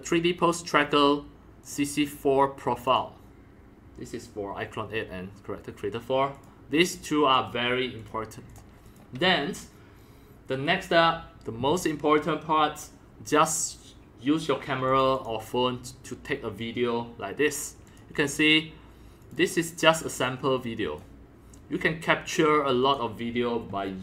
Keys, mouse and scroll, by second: 1.6 click, 1.8-2.8 drag, 2.9 click, 3.0-5.7 drag, 6.3 click, 6.8 click, 7.3 click, 8.0 click, 8.5 click, 8.7 middle click, 8.9 click, 14.9 click, 15.1 click, 16.2-18.0 drag, 19.2 click, 19.4-19.9 drag, 20.4 click, 22.2 click, 23.2-24.0 drag.